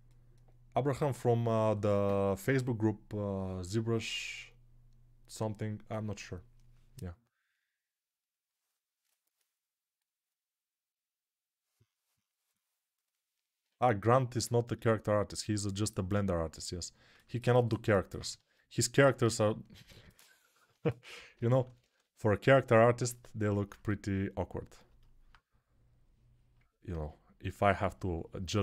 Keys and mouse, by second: 18.2 ctrl+Tab, 20.5-21.8 typing, 23.1 alt+q.